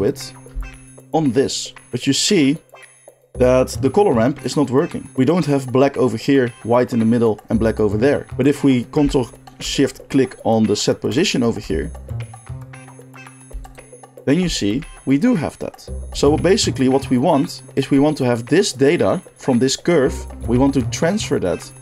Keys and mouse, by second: 1.0-2.6 ctrl+shift+middle drag, 11.0 ctrl+shift+click, 11.2-13.6 ctrl+shift+middle drag, 13.6 ctrl+shift+click, 13.7-20.0 ctrl+shift+middle drag.